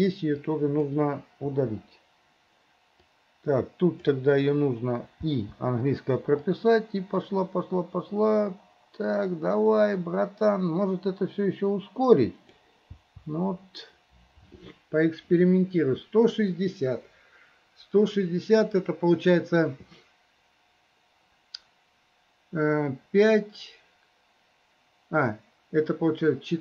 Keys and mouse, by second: 0.6 click, 1.6 Delete, 3.2-4.3 drag, 6.6-12.7 drag.